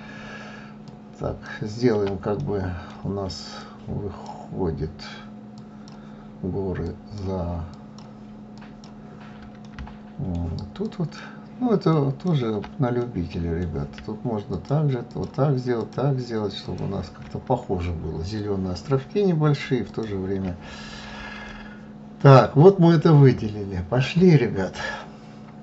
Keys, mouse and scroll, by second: 0.0 ctrl+click, 1.0-2.9 middle drag, 2.9 ctrl+click, 4.5 ctrl+click, 5.8 ctrl+click, 6.6 ctrl+click, 7.5 ctrl+click, 8.3-9.8 middle drag, 9.8 ctrl+click, 10.9 ctrl+click, 11.6-13.3 middle drag, 13.3 shift+click, 13.6 shift+click, 14.4 shift+click, 15.2 shift+click, 18.4 shift+click, 20.2-25.6 middle drag.